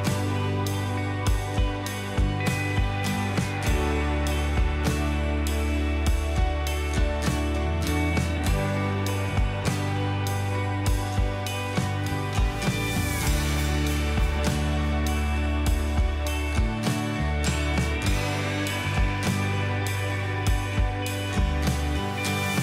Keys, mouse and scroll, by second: 2.0 double click, 2.4 space, 6.1 0, 6.8 ctrl+0, 9.4-10.1 scroll down 1, 11.5 scroll up 1, 14.3 typing, 15.2-15.6 alt+scroll down 1, 15.8-16.2 alt+scroll down 1.